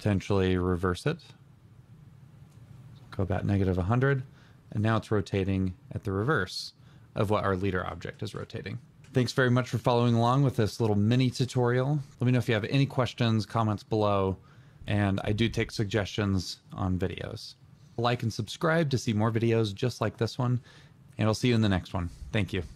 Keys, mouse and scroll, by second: 4.7 double click.